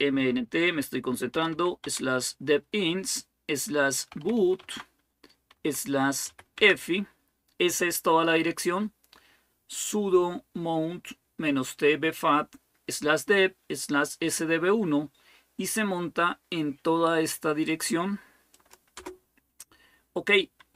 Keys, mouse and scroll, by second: 0.9-1.8 typing, 3.7-7.1 typing, 18.3 click, 18.8 Return, 18.9 click, 20.5-20.7 typing.